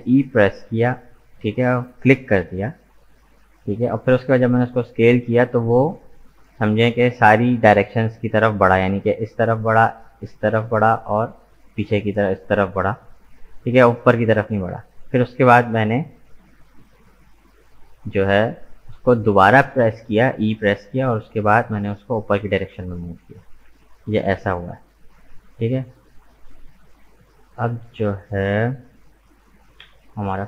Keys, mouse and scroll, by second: 10.7-18.0 middle drag, 22.8-24.7 middle drag, 24.7-25.0 scroll down 1, 25.0-28.0 middle drag, 29.8 KP_1.